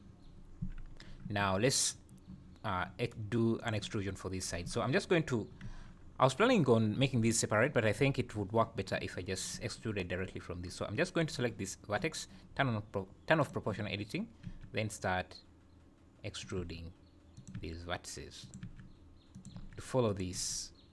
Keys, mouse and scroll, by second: 0.9 Tab, 3.6 click, 3.9 scroll up 2, 5.6 Tab, 6.0 scroll down 2, 7.2 ctrl+s, 8.0 Tab, 10.7 scroll up 1, 13.4 click, 14.5 e, 16.6 e, 17.5 e, 18.6 e, 19.5 e, 20.3 e.